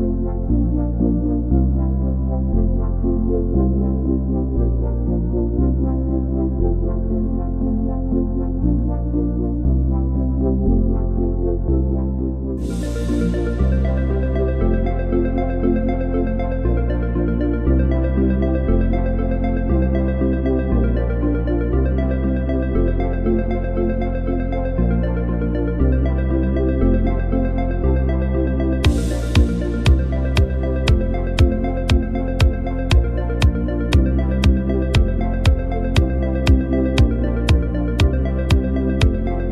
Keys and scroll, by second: 2.6 v, 25.0 super+-, 25.2 super+-, 25.4 super+-, 28.8-31.3 typing, 36.1 super+-, 36.3 super+-.